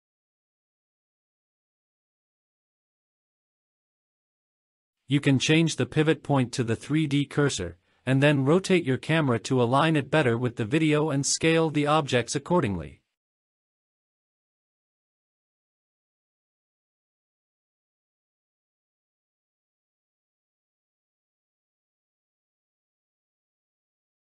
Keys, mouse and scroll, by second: 0.0 space, 0.9 click, 1.5-2.3 scroll down 3, 2.3 scroll down 1, 2.6-2.9 shift+middle drag, 3.2 drag, 3.9 click, 4.6-9.1 typing, 4.8 middle click, 5.0 click, 5.7 click, 7.1 click, 7.7 click, 7.7-8.1 scroll up 4, 8.1 shift+middle click, 8.1 scroll down 1, 8.1 scroll up 1, 8.5 ctrl+z, 8.5-8.9 scroll down 4, 8.7 ctrl+z, 8.9-9.6 scroll up 2, 9.7 shift+middle click, 9.7 scroll down 1, 10.3 click, 11.4 click, 12.1 shift+click, 12.7 click, 12.7 scroll down 5, 13.5 alt+z, 13.7 space, 14.2 click, 14.8 alt+z, 14.8 scroll up 1, 15.0 alt+z, 15.0 click, 15.2 click, 15.2-18.1 typing, 15.4 scroll down 2, 16.0 scroll down 1, 16.1 click, 17.1 Escape, 17.4 click, 18.5 click, 18.5 scroll up 1, 18.7 scroll down 3, 18.8 Tab, 19.1-24.2 typing, 19.2 drag, 19.3 Tab, 19.3 shift+middle click, 19.5 shift+middle click, 20.2 click, 20.3 click, 20.5 Tab, 20.5 scroll up 1, 21.1 click, 21.4 middle click, 21.4 scroll down 2, 22.3 click, 22.5 click, 22.7 Tab, 22.7-23.1 scroll up 5, 23.3-23.8 scroll down 3, 23.7 Tab.